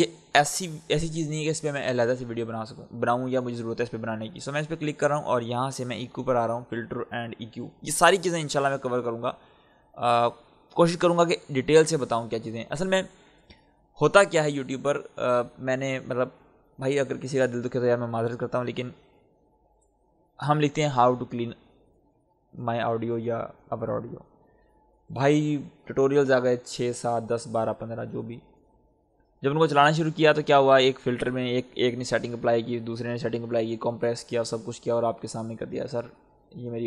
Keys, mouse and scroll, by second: 4.5 click, 14.2 click.